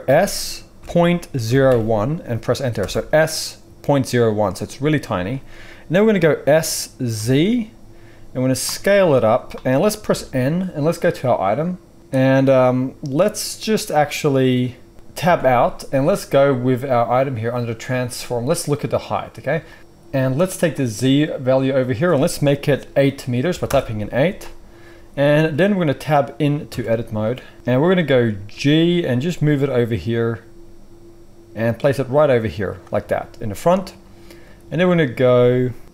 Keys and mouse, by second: 0.0 s, 6.5 s, 9.3-19.8 middle drag, 10.1 n, 15.2 Tab, 19.8 ctrl+z, 19.8-32.7 drag, 26.6 Tab, 28.4 g, 32.7-35.9 shift+middle drag.